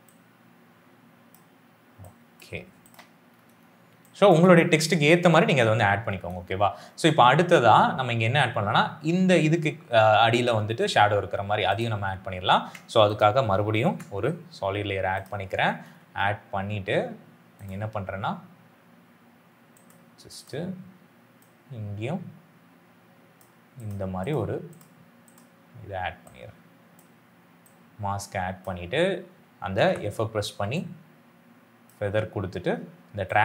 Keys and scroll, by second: 3.8 space, 13.7 ctrl+y, 29.8 f.